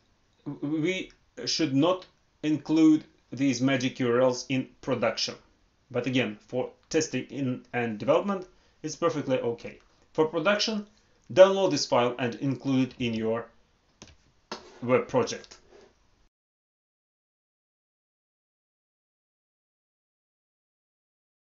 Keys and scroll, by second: 12.9 alt+Tab.